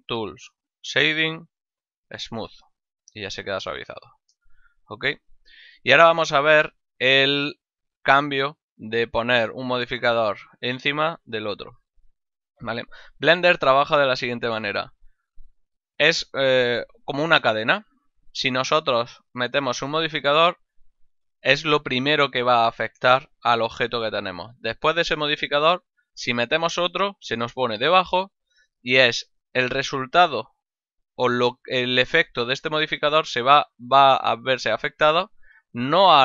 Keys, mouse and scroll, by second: 2.3 click, 3.4 middle click, 3.8 ctrl+middle click, 4.3 shift+middle click, 5.8 middle click, 6.3 ctrl+middle click.